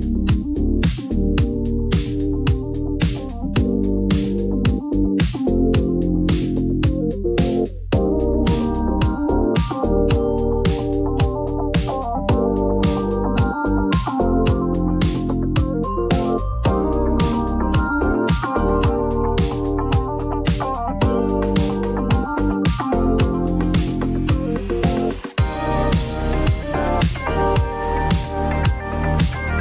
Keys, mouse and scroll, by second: 1.7-5.4 typing, 2.6 click, 4.9 click, 7.6 click, 8.2 click, 9.6 right click, 11.4 click, 13.3 click, 14.2-15.5 typing, 16.3 click, 16.4 click, 17.6 click, 18.5 click, 19.8 click, 21.3 click, 23.2 click, 25.0 click, 25.8 click, 27.7 click, 27.8-28.3 typing.